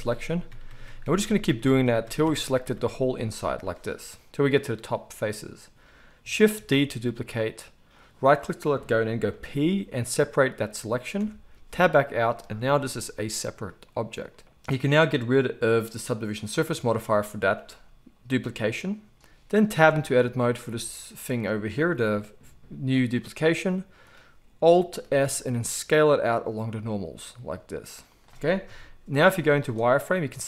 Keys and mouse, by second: 6.7 shift+d, 8.0-12.2 middle drag, 9.3 p, 11.2 Tab, 12.2 click, 12.3-16.6 middle drag, 12.7 g, 16.6-19.1 drag, 18.3 g, 19.1 middle click, 19.1 z, 19.8 Tab, 20.7 a, 21.8 g, 25.0 alt+s, 28.2-30.4 middle drag, 28.6 KP_1, 29.1 z.